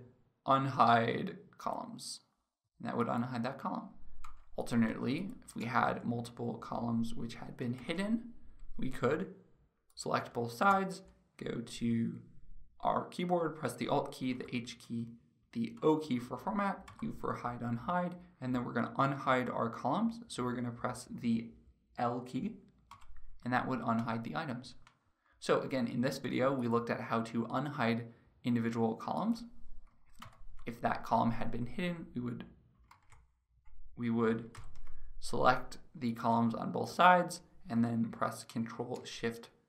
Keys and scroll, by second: 7.4 ctrl+0, 30.0 ctrl+-, 32.8 ctrl+z, 34.8 ctrl+0, 39.4 ctrl+shift+0.